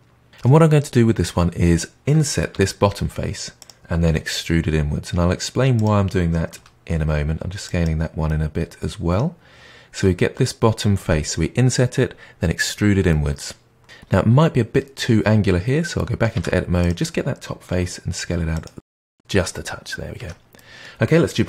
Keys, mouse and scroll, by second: 2.5 i, 4.0 e, 6.5 s, 8.2-11.2 middle drag, 13.0-16.3 middle drag, 16.3 Tab, 16.7 click, 17.7 s, 18.9-20.1 middle drag, 20.1 Tab, 20.5-21.4 middle drag.